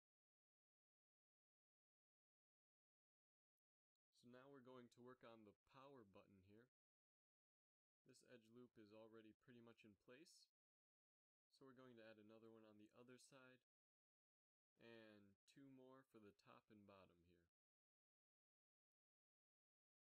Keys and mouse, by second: 2.6 KP_Divide, 5.3 z, 6.7 z, 7.7 z, 9.0 g, 13.1 ctrl+r, 16.0 ctrl+r, 19.0 s.